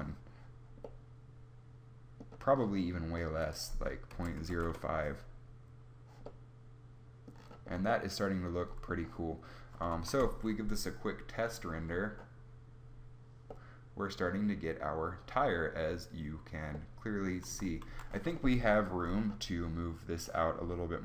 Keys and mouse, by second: 0.9 middle click, 11.2 shift+z, 17.5 z, 17.9 z.